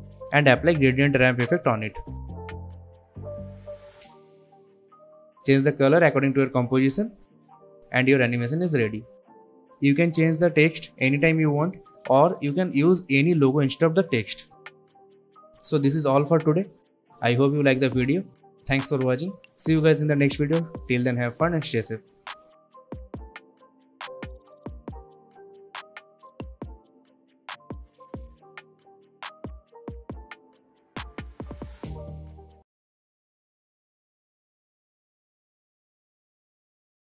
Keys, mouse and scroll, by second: 0.0-1.3 typing, 1.9 click, 3.5 ctrl+z, 4.6 click, 6.3 click, 17.7 click, 18.5-19.5 click, 19.8 space, 20.3 click, 20.4 space, 21.0 space.